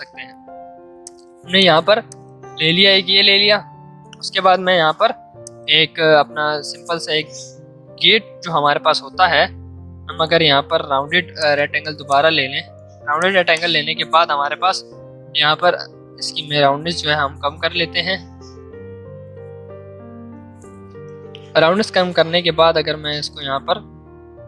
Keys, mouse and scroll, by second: 0.4 v, 1.0 click, 1.4 z, 1.6 click, 2.1 click, 2.8 v, 4.4-5.1 typing, 5.4-8.3 shift+drag, 8.3 v, 11.3-14.5 drag, 14.5 Up, 21.2 Down, 21.9 space.